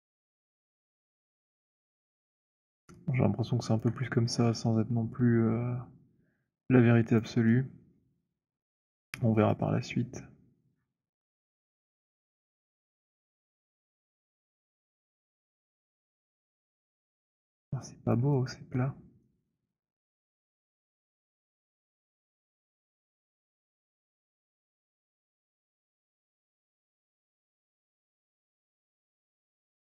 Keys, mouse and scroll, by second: 1.0 click, 2.0 alt+click, 2.7 alt+middle click, 3.8 alt+click, 7.1 alt+click, 8.0 alt+right click, 8.6 right click, 8.9 click, 9.5 click, 10.7 middle click, 12.2 click, 12.9 h, 14.0 click, 14.1-14.9 scroll, 14.9-15.4 scroll, 17.4 alt+click, 17.4 alt+right click, 17.8 alt+click, 19.0 alt+middle click, 19.5 alt+middle click, 21.2 click, 22.0 shift+click, 23.8 alt+click, 25.2 middle click, 27.0 click, 27.8 w, 28.0 right click.